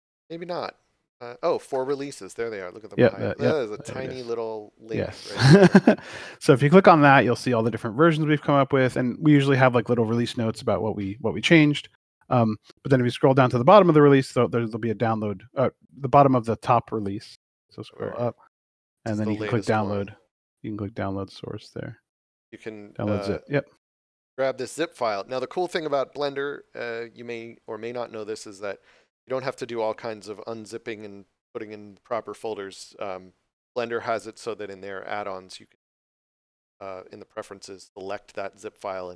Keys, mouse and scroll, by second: 0.4 scroll up 1, 5.5 click, 8.6 click, 11.9 scroll down 1, 14.5-16.3 scroll down 1, 16.3-17.6 scroll up 4, 19.9 scroll down 1, 29.2 scroll up 1.